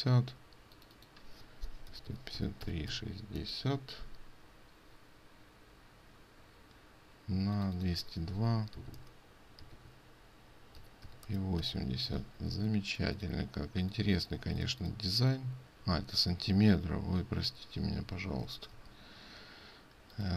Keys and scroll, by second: 12.6 ctrl+space, 18.5 ctrl+z, 18.7 ctrl+z.